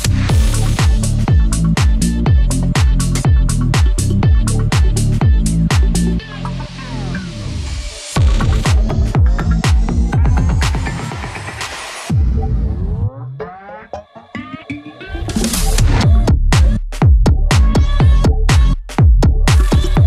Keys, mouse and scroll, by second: 0.9 b, 2.2-10.0 drag, 10.8 click, 12.4-15.5 drag, 15.7 click, 17.9 click.